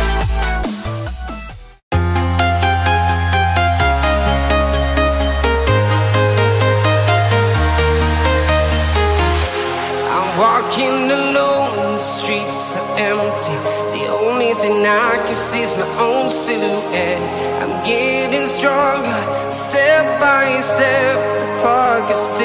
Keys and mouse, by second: 0.6 click, 0.9 middle click, 2.8 click, 3.7 middle click, 4.8 middle click, 5.8 click, 8.0 click, 10.2 click, 10.8 click, 12.1 click, 12.7 click, 19.8 click, 20.3 click, 21.1 middle click.